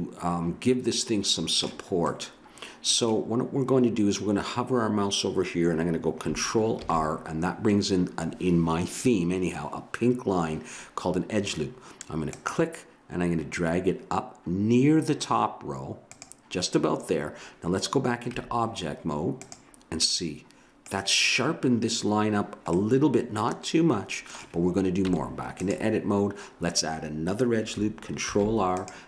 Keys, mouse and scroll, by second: 2.1 middle click, 6.8 ctrl+r, 18.3 Tab, 20.0-21.9 middle drag, 22.8 middle click, 25.0 Tab, 28.3 ctrl+r.